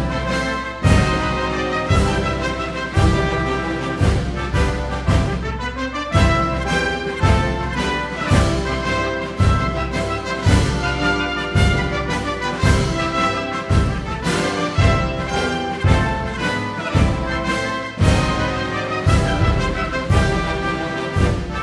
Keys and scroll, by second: 18.7-19.5 typing, 20.8 typing.